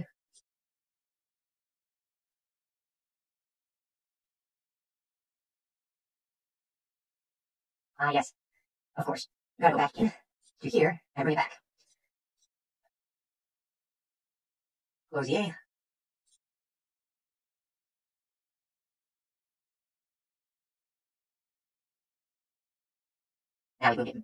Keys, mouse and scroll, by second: 0.3 click, 0.9 scroll, 2.2 click, 3.6 click, 4.2 right click, 6.1 click, 8.2 click, 10.4 click, 11.8 click, 12.4 click, 13.4 click, 13.9 click, 19.5-20.0 scroll, 20.2 click, 20.2 scroll, 20.2 click, 20.8 click, 21.0 click, 21.4 click, 21.9 click, 22.2 click, 23.0 right click, 23.0 click.